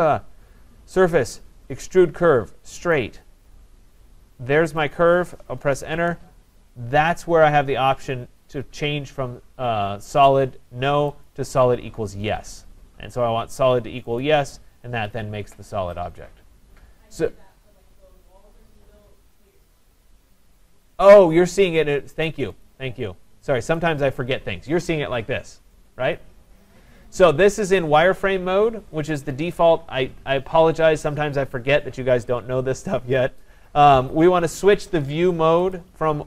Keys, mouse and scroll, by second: 3.0 click, 4.8 click, 5.6 Return, 11.3 click, 14.2 click, 22.6 click, 23.8 click, 35.8 click.